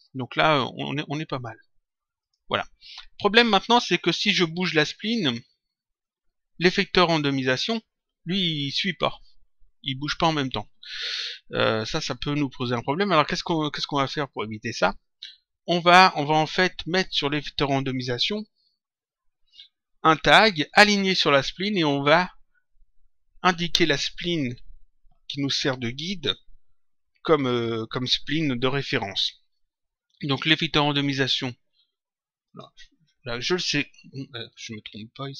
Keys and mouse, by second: 1.3 click, 4.0 click, 5.9 click, 12.5 click, 14.2 click, 17.1 click, 30.3 click, 32.4 click, 35.1 click.